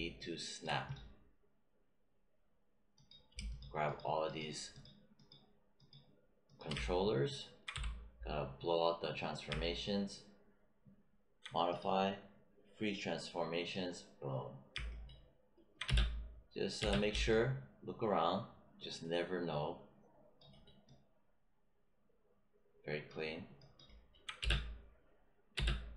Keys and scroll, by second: 7.6 w, 15.8 space, 24.4 space, 25.5 space.